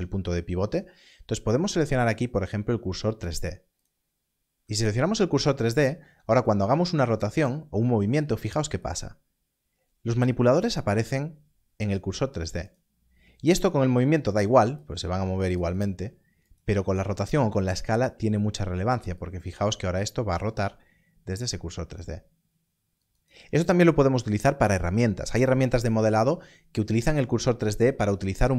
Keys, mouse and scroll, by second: 3.7 click, 8.8 click, 12.6 click, 15.4 right click, 19.1 click, 23.0 right click.